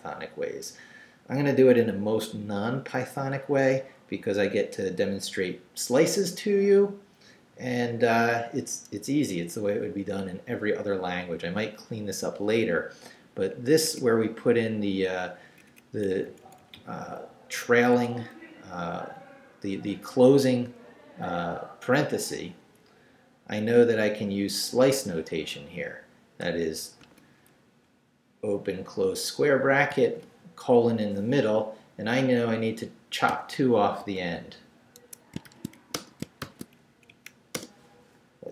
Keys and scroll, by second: 12.4 Return, 13.9 Down, 14.0 Up, 15.7 Up, 16.0 Right, 17.9 Right, 20.7 Left, 21.1 Right, 22.5 Left, 25.3 i, 27.0 ], 27.6 Left, 29.9 shift+;, 33.3 -, 34.0 2, 35.0 Escape, 35.4 shift+;, 35.7 shift+w, 35.9 Return, 36.4 shift+;, 36.9 shift+Up, 37.5 Return.